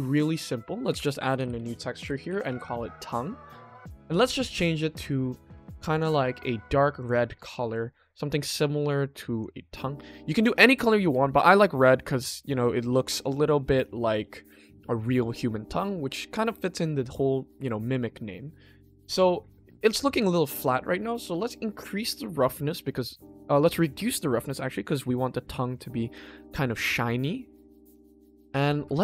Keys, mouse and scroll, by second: 0.0 drag, 0.4 click, 3.3 middle click, 4.2 click, 6.9 click, 9.9-10.5 ctrl+middle drag, 10.7-11.1 shift+middle drag, 11.5 click, 11.9-12.8 middle drag, 13.2-13.7 middle drag, 20.4 scroll up 1, 21.7-25.7 drag, 26.2-26.7 shift+middle drag, 27.3-27.6 middle drag, 28.1-28.6 ctrl+middle drag, 28.9-29.0 shift+middle drag.